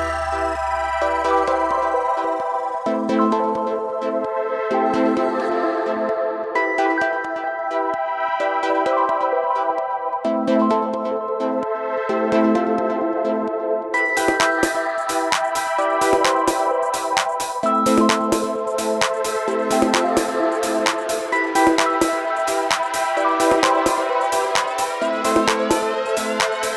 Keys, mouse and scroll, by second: 4.8 alt+Num_Lock, 5.1-5.4 alt+scroll up 3, 6.9 scroll down 1, 7.5 space, 7.7 click, 8.2 space, 8.8 alt+scroll down 1, 8.9 space, 21.7 click, 24.4 click.